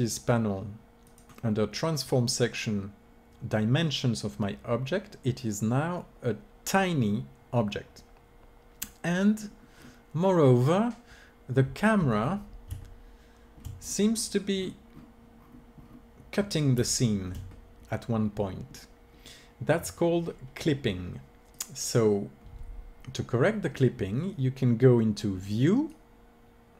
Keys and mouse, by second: 1.0-2.7 drag, 9.4-21.5 middle drag, 21.5-23.4 drag, 25.4-26.7 drag.